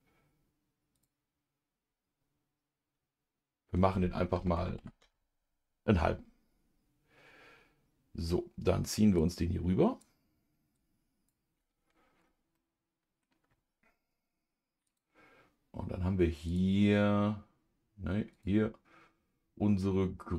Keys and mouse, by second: 0.9-7.2 drag, 10.7 click, 12.5 middle click, 14.9 click, 16.5 click, 18.3-20.3 drag.